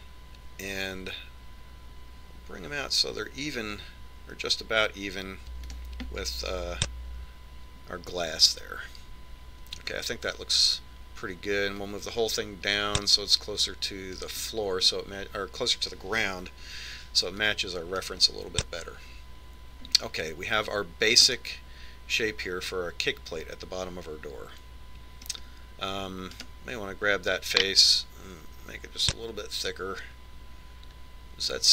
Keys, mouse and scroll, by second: 7.3 KP_1, 12.9 click, 18.5 click, 22.5-24.2 middle drag, 27.5 right click, 29.0 click.